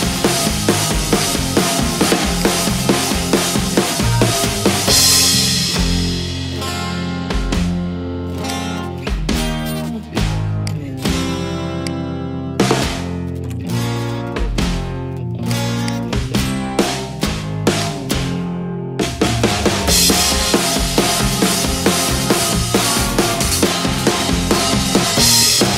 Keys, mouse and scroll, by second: 1.3 click, 2.5 click, 3.0 click, 7.7 click, 8.5 click, 10.8 click, 13.2-14.2 typing, 15.6 click, 15.9 click, 17.9 click, 19.5 click, 23.4 click.